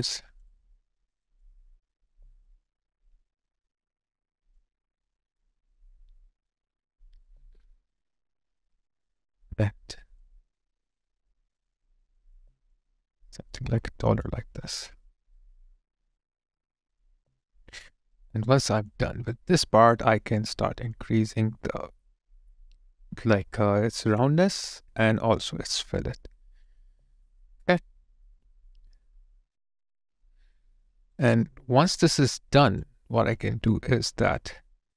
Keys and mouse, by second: 0.0 alt+click, 17.0 alt+click, 18.1 alt+right click, 18.6 alt+click, 19.0 alt+right click, 27.8 alt+click, 30.8 alt+right click, 31.3 alt+click, 34.2 alt+click.